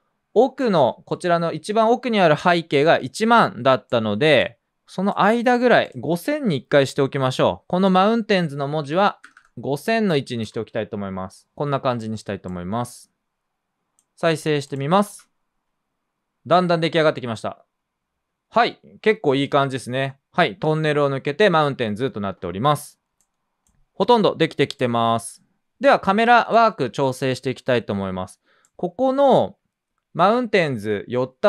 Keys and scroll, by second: 8.9-10.2 typing, 10.4 Return, 14.1-15.0 typing, 23.7 space.